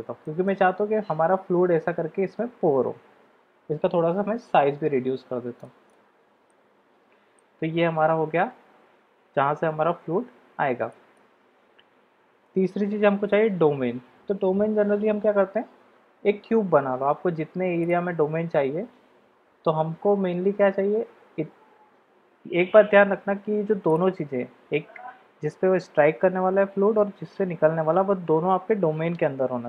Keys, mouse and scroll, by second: 0.2 middle drag, 4.0 s, 6.4-7.4 middle drag, 10.9-11.2 shift+drag, 15.4 shift+a, 19.4 s.